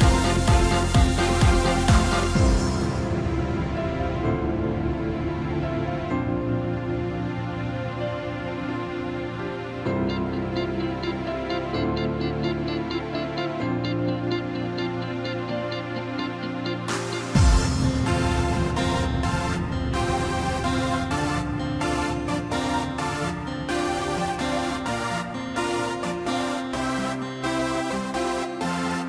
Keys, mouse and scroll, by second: 0.1-0.5 scroll down 1, 0.8 middle click, 1.7-2.0 scroll up 1, 2.0-3.3 middle drag, 3.3 2, 4.2 click, 4.6-4.9 scroll up 2, 4.9-5.3 scroll down 3, 5.3-6.3 middle drag, 6.3 z, 11.5 click, 12.9 e, 16.7-17.1 scroll up 2, 17.1-17.7 scroll down 1, 17.7 3, 18.3 click, 18.9 scroll up 1, 19.0 scroll down 2, 19.3-20.5 middle drag, 20.5 p, 21.7 Tab, 22.3 click, 22.8-23.2 scroll up 1, 23.2 scroll down 1, 23.4-25.1 middle drag, 25.1 Tab, 25.9 KP_7, 26.7-27.0 scroll up 1, 27.7 ctrl+r.